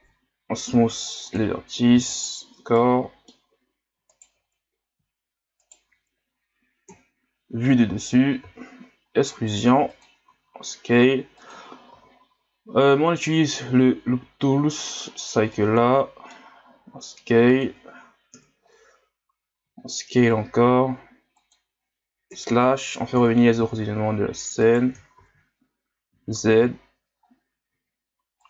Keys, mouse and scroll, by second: 0.0 ctrl+KP_Add, 0.7 w, 1.9 w, 2.7-4.1 middle drag, 4.1 alt+right click, 5.6 alt+right click, 6.8 KP_7, 8.5 e, 11.9 w, 15.5-16.8 middle drag, 16.8 s, 18.3 KP_1, 19.6 s, 22.3 KP_Divide, 23.2 KP_1, 23.6 e, 25.2 ctrl+z, 26.1 z, 26.7-27.1 scroll down 2, 27.1 scroll up 2, 27.6 s.